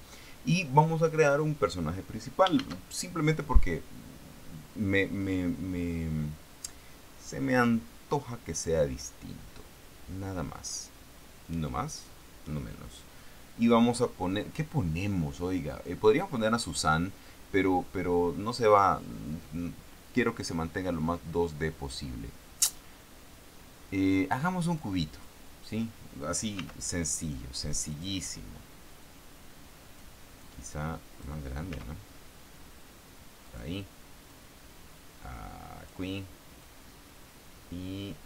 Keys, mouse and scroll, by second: 2.9 shift+a, 25.5 click, 26.9 s, 28.3 click, 29.4 click, 31.1 click, 32.1 s, 33.8 click, 34.6-36.5 drag, 37.0-38.2 drag.